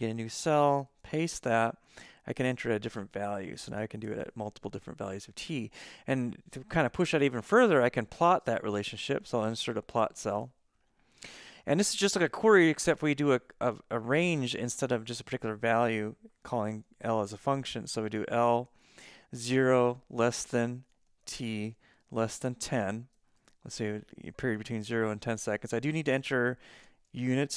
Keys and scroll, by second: 0.9 super+v, 3.3 Left, 3.7 BackSpace, 4.1 4, 16.9 shift+l, 18.7 shift+9, 19.4 0, 20.0 shift+,, 21.2-23.9 typing, 23.7 Left, 23.9 Left, 24.0 Left, 24.2 Left, 24.3 Left, 24.5 Left, 24.6 Left, 25.0 Right, 25.6-27.5 typing.